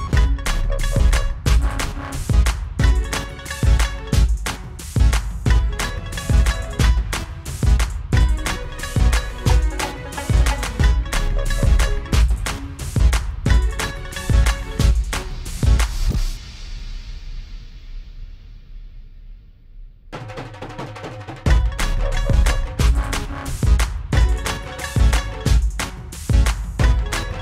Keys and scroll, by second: 10.3 F9, 25.8-26.7 typing.